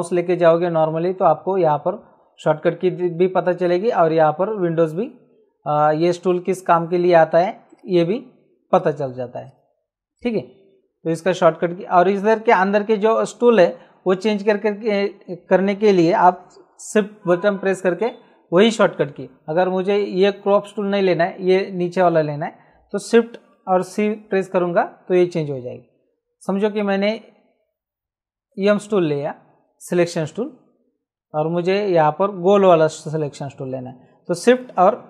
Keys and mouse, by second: 7.7 right click, 8.7 right click, 26.7 click, 28.6 click.